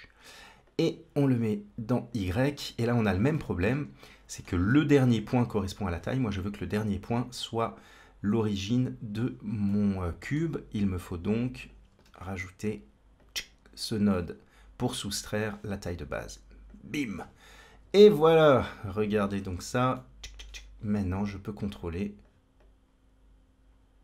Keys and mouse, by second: 0.5-2.1 drag, 3.3 shift+middle click, 4.6 shift+middle click, 9.5 middle click, 11.4 click, 11.9 shift+d, 15.2-16.6 drag, 17.8 ctrl+space, 19.4 ctrl+space, 19.8-20.3 shift+middle drag, 21.1-22.1 drag, 22.5-24.0 drag.